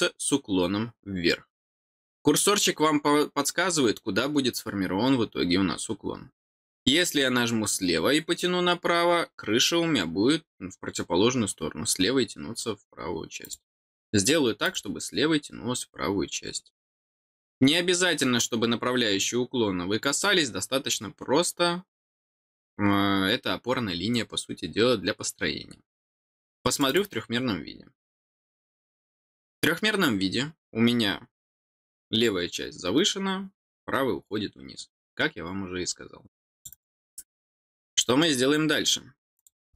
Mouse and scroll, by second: 1.8 scroll down 1, 5.4 middle click, 13.4 click, 14.6 click, 20.1 click, 26.6 click, 26.8 click, 36.5 click, 36.6 click, 37.8 middle click, 39.3 click.